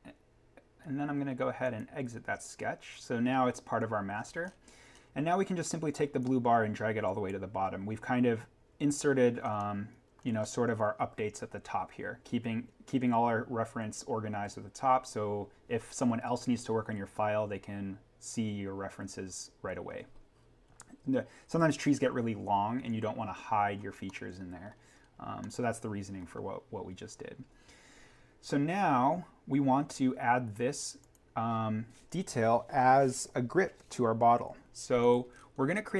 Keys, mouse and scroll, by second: 2.9-3.7 scroll up 1, 6.2 click, 9.3 scroll up 1, 9.6 middle click, 10.0-10.7 scroll up 1, 12.5 scroll down 1, 19.6-21.5 scroll down 1, 23.9 scroll up 1, 24.1 middle click, 24.3-24.9 scroll, 25.3 middle click, 26.6-27.5 scroll down 1, 28.7-31.0 scroll up 1, 31.0 click, 35.0 click, 35.3-35.9 scroll up 1.